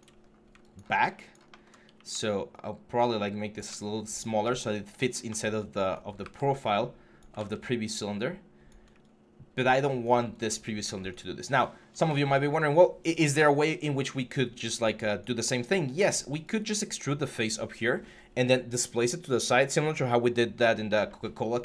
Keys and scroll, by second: 0.0 typing, 1.7 r, 6.0 w, 7.1 ctrl+z.